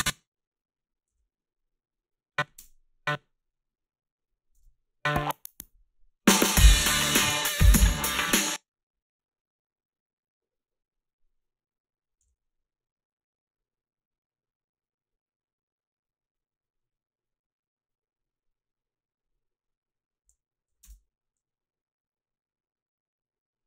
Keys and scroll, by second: 1.1 g, 2.5 space, 4.6 space, 8.3 space, 12.2 f, 20.7 i, 20.8 space.